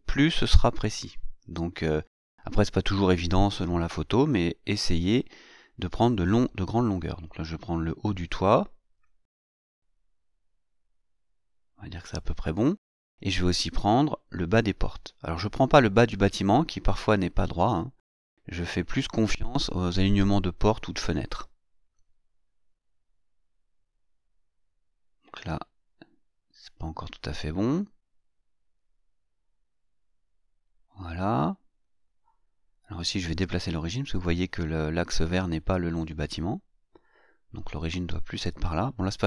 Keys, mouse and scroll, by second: 5.8-7.2 scroll up 2, 7.2-7.5 scroll up 1, 8.3 click, 11.7-14.3 drag, 14.3-15.8 middle drag, 15.8-18.2 scroll down 1, 18.7-21.8 drag, 22.0-23.5 scroll up 1, 25.2-30.9 drag, 32.3-39.2 drag.